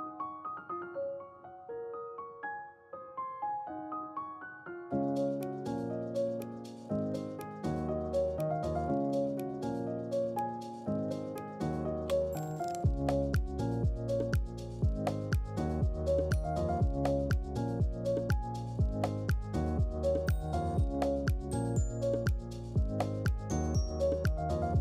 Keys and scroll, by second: 2.0 Delete, 6.9-8.0 typing.